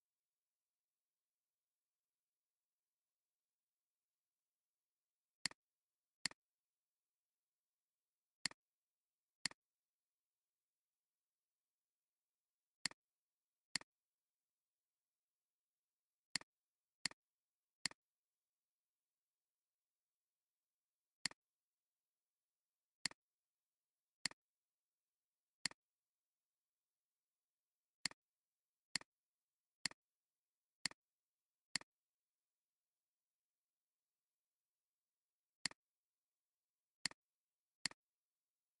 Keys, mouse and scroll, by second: 6.2 click, 7.8 alt+scroll up 1, 9.5 alt+click, 17.0 space, 18.7 Down, 18.9 Down, 19.2 Down, 19.4 Down, 19.6 Down, 19.8 Down, 20.0 Down, 20.2 Down, 20.3 Down, 20.5 Down, 22.6 alt+scroll down 1, 22.9 space, 25.7 alt+click, 29.2 alt+scroll down 1, 30.4 alt+scroll up 2, 30.8 alt+scroll, 30.8 alt+scroll up 1, 33.7 Down, 34.6 Down, 34.8 Down, 34.9 Down, 35.1 Down, 35.3 Down, 36.6 alt+scroll down 1, 36.9 space, 37.2 alt+scroll down 1, 37.4 space, 38.4 alt+scroll up 3.